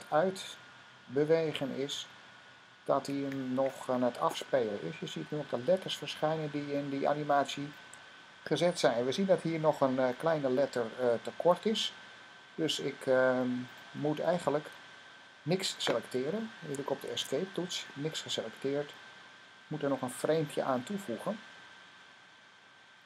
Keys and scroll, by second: 17.0 Escape, 22.7 F5.